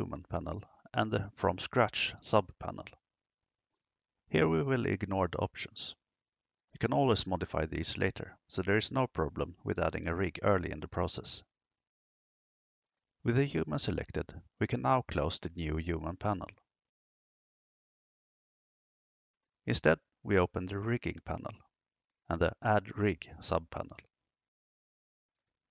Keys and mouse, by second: 0.7 click, 3.1-5.1 drag, 12.7 click, 18.0 click, 20.3 click, 22.4 click, 25.5 click.